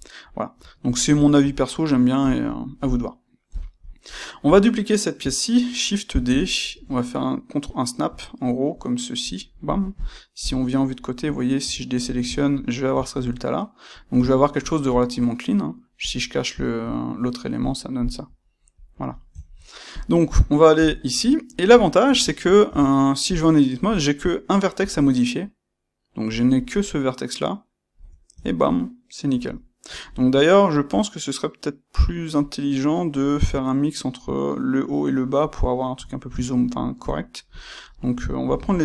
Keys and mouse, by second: 2.2 click, 2.5-9.2 shift+middle drag, 3.4 KP_1, 6.0 shift+d, 9.2 click, 9.6-16.0 shift+middle drag, 10.4 KP_3, 11.6 a, 16.0 click, 16.5-18.7 shift+middle drag, 18.7 click, 19.3-19.8 ctrl+middle drag, 19.8 click, 20.6 KP_1, 21.3-22.6 ctrl+middle drag, 22.6 Tab, 23.8 click, 24.8 g, 26.4 click, 27.9 Tab, 28.4-37.0 ctrl+middle drag, 37.0 click, 37.6-38.2 shift+middle drag, 38.2 shift+click.